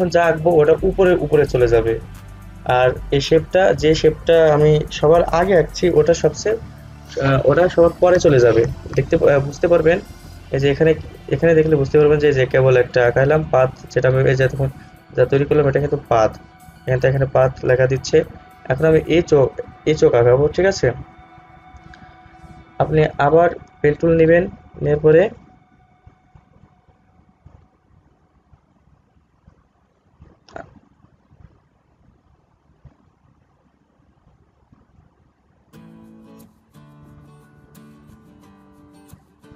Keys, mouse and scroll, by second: 11.4 click, 23.6-30.0 drag, 33.2-39.5 drag.